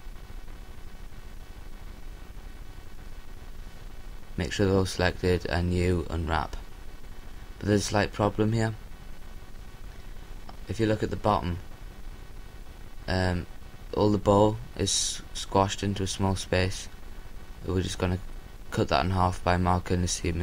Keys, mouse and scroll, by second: 7.9 u, 19.3 a.